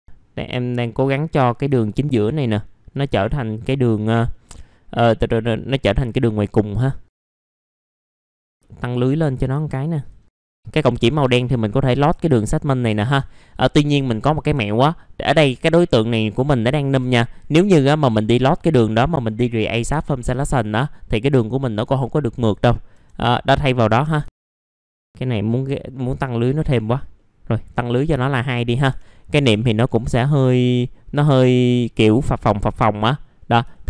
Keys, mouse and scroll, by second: 1.2 click, 1.9 alt+middle click, 2.9 click, 3.6-4.3 scroll down 1, 4.3 middle click, 6.4 scroll up 1, 6.8 alt+middle click, 7.1 middle click, 7.2 scroll up 1, 7.6 alt+middle click, 8.1 F4, 8.4 click, 8.6 alt+middle click, 9.2 middle click, 9.6 alt+middle click, 10.2 scroll up 2, 10.4 click, 10.7 alt+middle click, 11.2 scroll down 1, 11.6 alt+middle click, 12.3-12.9 scroll up 1, 12.9 scroll up 1, 13.6 middle click, 13.9 F4, 22.5-24.0 scroll up 2, 24.0 1, 24.4 click, 24.8 F4, 26.6 click, 27.1 middle click, 27.9 scroll down 1, 28.2 alt+middle click, 28.9 F4, 29.2 scroll down 1, 29.7 scroll down 1, 30.5-31.4 scroll up 1, 31.4 middle click, 33.0-33.4 scroll down 1, 33.4 middle click, 33.7 alt+middle click.